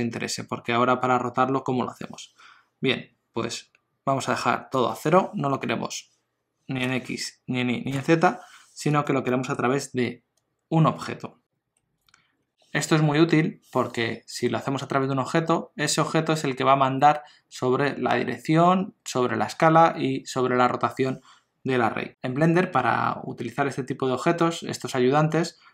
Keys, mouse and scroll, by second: 4.9 click, 8.9 click, 9.3 middle click, 11.1-11.5 scroll up 1.